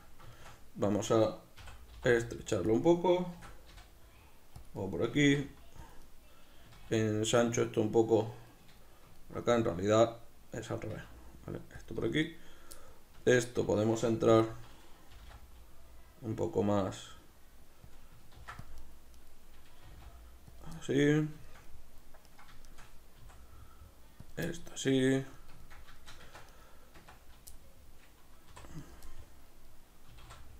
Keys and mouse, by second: 1.6 s, 2.8 click, 3.4 shift+d, 4.7 click, 4.8-5.9 middle drag, 5.1 s, 5.9 click, 6.0-7.7 middle drag, 6.7 s, 7.7 click, 8.5-11.9 shift+middle drag, 10.8 s, 11.9 click, 12.2 right click, 13.1 Tab, 13.1-14.4 middle drag, 14.4 right click, 15.1 g, 17.9 click, 18.3 ctrl+r, 18.9 right click, 19.8 g, 20.6 click, 20.8-22.3 middle drag, 22.3 right click, 23.2 s, 24.4 click, 24.4-26.5 middle drag, 26.2 Tab, 26.5 right click, 27.0 Tab, 27.5-28.8 middle drag, 28.5 3, 28.8-30.1 right drag, 30.1-30.5 middle drag, 30.1 s.